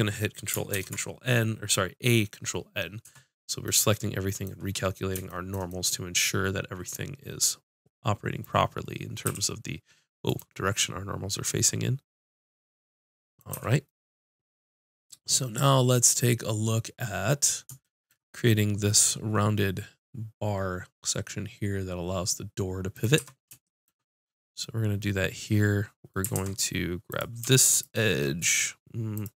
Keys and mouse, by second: 0.7 ctrl+n, 3.0 Tab, 9.2-12.5 middle drag, 9.2 s, 13.5 a, 22.9 click, 23.1 Tab, 26.3 ctrl+Tab, 26.6-29.3 drag.